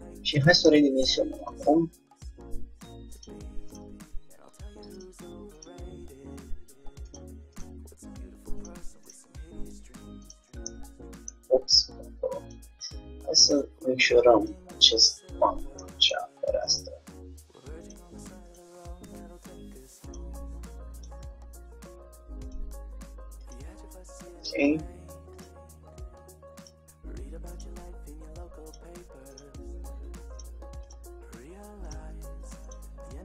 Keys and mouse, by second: 1.5 click, 2.0 right click, 2.0 g, 2.5 click, 4.4-5.5 drag, 4.5 g, 5.7-7.4 drag, 7.6-10.8 drag, 7.8 g, 9.2 g, 10.8-12.5 middle drag, 12.5-15.5 drag, 15.2-17.6 middle drag, 16.8-20.2 drag, 21.0-22.7 drag, 23.6-25.1 drag, 23.8 g, 25.6-27.0 drag, 25.6 g, 27.6-29.3 drag, 28.0 g, 29.6-32.7 drag, 31.1 g, 32.8-33.2 drag, 32.9 g.